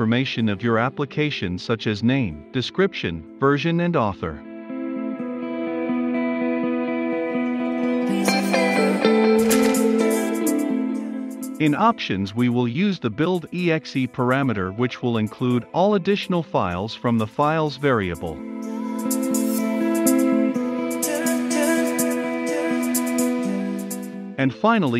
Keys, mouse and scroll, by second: 0.0 Return, 0.9-2.3 typing, 2.9 Return, 3.7-19.3 typing, 5.6 Right, 8.6 click, 10.4 Right, 10.6 Return, 11.9 Left, 12.1 Right, 17.1 Return, 17.6 Return, 18.5 click, 19.5 Return, 19.8-23.2 drag, 23.2-24.6 typing, 23.4 Return.